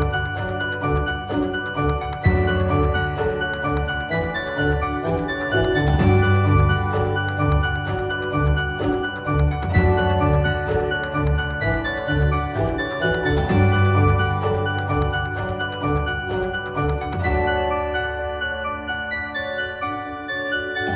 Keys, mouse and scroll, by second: 10.9-16.1 drag, 18.4 right click, 19.0 click.